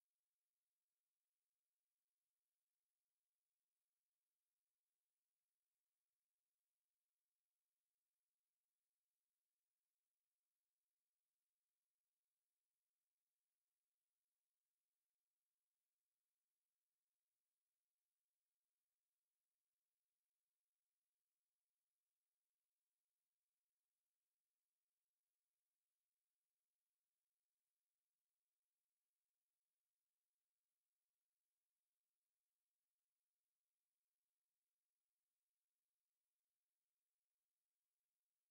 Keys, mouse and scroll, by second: 0.4 shift+click, 0.7 shift+click, 1.8 click, 4.3 ctrl+z, 5.4 shift+click, 5.7 shift+click, 6.2 x, 7.4 shift+click, 8.4 shift+click, 10.1 x, 11.0 click, 11.4 shift+click, 12.2-13.3 shift+middle drag, 13.3 shift+click, 13.9 shift+click, 14.7 shift+click, 14.9 shift+click, 15.5 shift+click, 16.6 click, 19.1 x, 19.9 click, 20.2 shift+click, 21.0 shift+click, 21.5 shift+click, 21.8 shift+click, 22.6 shift+click, 23.3 shift+click, 23.6 shift+click, 24.5-24.9 shift+scroll down 1, 25.2 scroll down 1, 25.5-26.1 shift+middle drag, 26.1 shift+click, 26.5 shift+click, 26.9 shift+drag, 27.4 shift+click, 28.0 shift+click, 28.3 shift+click, 28.8 shift+click, 29.1 shift+click, 29.6 x, 30.9 click, 31.4 x, 31.9-32.5 scroll down 2, 32.5 shift+middle click, 33.2 click, 34.4 x, 35.2 click, 35.8 x, 36.6-37.6 shift+middle drag, 37.6-38.0 scroll down 1, 38.0 shift+middle click, 38.3-38.5 shift+scroll down 3.